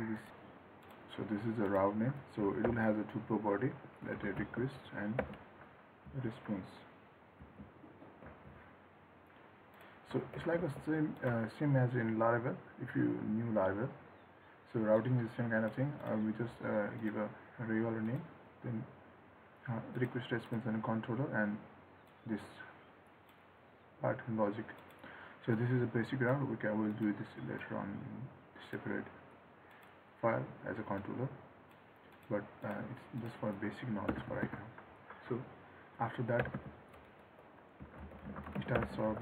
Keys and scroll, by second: 10.5 ctrl+s.